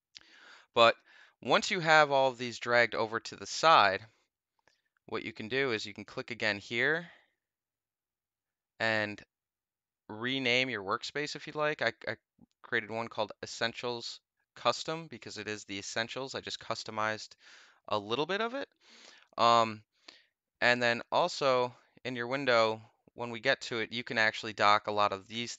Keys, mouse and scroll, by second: 5.6 click, 10.3 click, 21.2 click.